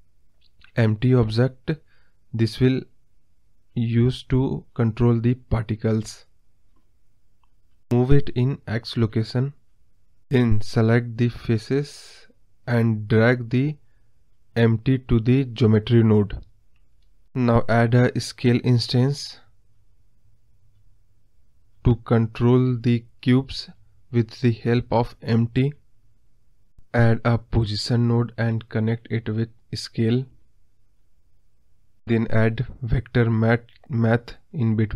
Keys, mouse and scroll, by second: 1.6-4.8 scroll down 1, 5.2 scroll down 1, 5.3-8.2 middle drag, 8.2-9.6 drag, 12.0 scroll up 2, 12.1-13.3 middle drag, 13.3 click, 13.8 click, 17.1 click, 31.6 click, 32.1 scroll down 1, 32.3-34.9 middle drag.